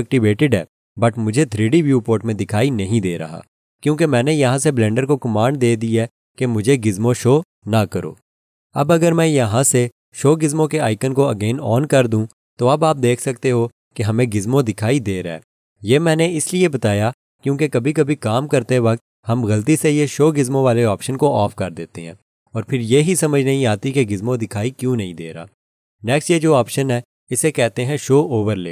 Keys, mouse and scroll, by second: 12.0 click.